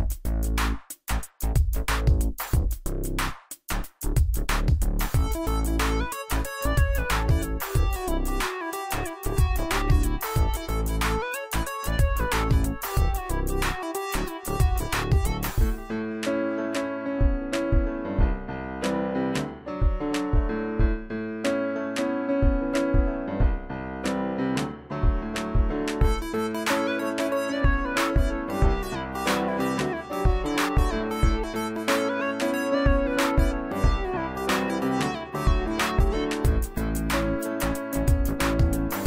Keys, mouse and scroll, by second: 7.7 click, 8.9-9.3 scroll down 1, 11.9 right click, 12.9 click, 13.0-16.3 drag, 14.2-15.5 drag, 17.5-18.1 alt+click, 21.0-21.4 click, 36.4 click, 36.4 click.